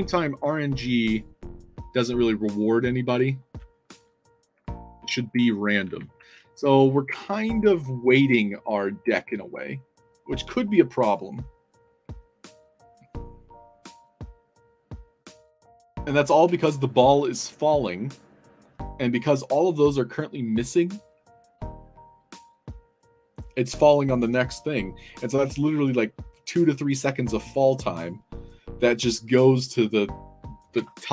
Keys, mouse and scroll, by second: 1.0 scroll up 2, 4.0-6.6 typing.